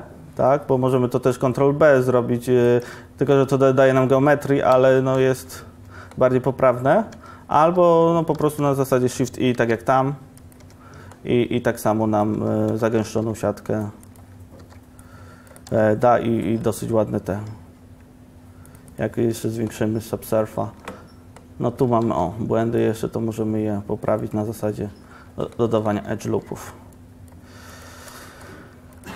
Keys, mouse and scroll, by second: 3.0 Tab, 5.6 ctrl+1, 7.4 Tab, 8.0 ctrl+z, 8.6 ctrl+z, 9.8 shift+e, 10.7 Tab, 12.5 Tab, 13.2 ctrl+r, 14.7 ctrl+r, 20.9 Tab, 22.2 ctrl+r, 26.7 ctrl+r, 28.1 ctrl+z, 28.4 ctrl+r.